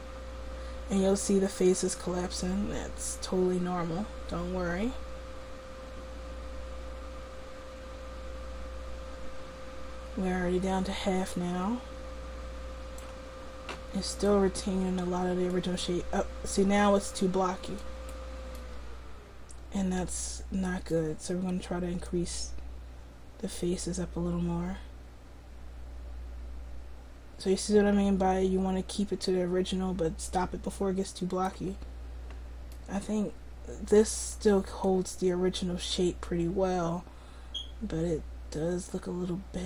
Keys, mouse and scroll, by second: 15.1-17.8 middle drag, 17.8-18.9 drag, 18.7 middle click, 18.7 right click, 19.1 click, 19.4 middle click.